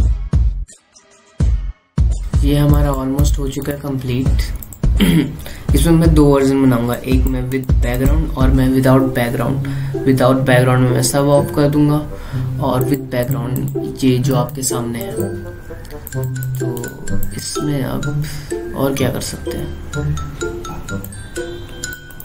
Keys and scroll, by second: 0.8 ctrl+z, 1.9 F7.